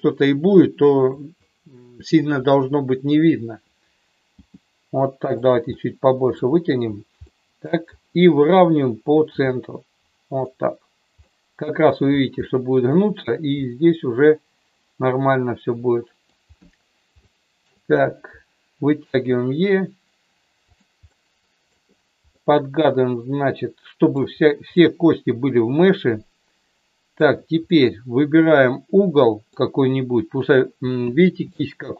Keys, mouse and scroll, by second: 4.4 g, 5.4 click, 5.7 middle click, 7.2 middle click, 9.3 g, 11.3 middle click, 12.4 middle click, 13.6-16.3 middle drag, 17.2 shift+middle click, 19.0 e, 21.0 middle click, 22.3-24.2 middle drag, 24.8-27.2 middle drag, 27.2 scroll down 1, 27.7-29.5 middle drag, 31.4 shift+middle click.